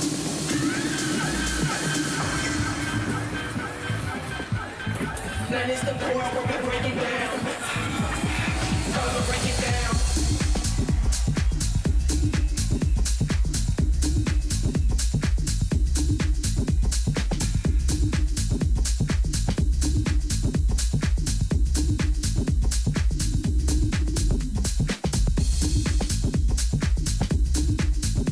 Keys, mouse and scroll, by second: 0.0 z, 3.8 Tab, 4.6 middle click, 5.5 Tab, 6.0 z, 9.3-11.9 middle drag, 11.1 t, 11.9 a, 12.3 a, 13.2-14.6 middle drag, 15.1-16.9 drag, 17.8-20.3 middle drag, 20.6-22.5 middle drag, 26.1-26.8 scroll up 1, 26.8 scroll down 1, 28.0-28.3 right drag.